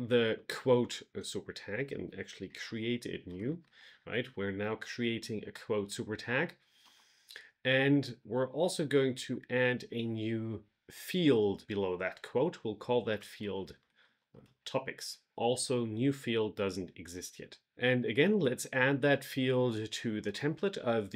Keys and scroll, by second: 2.4 shift+3, 6.7 Return, 9.0 Tab, 13.5 shift+t.